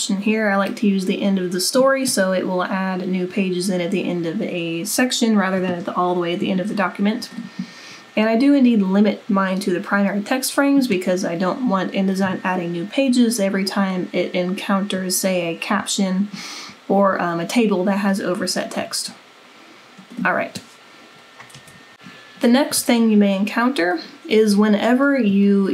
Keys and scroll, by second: 21.6 super+-.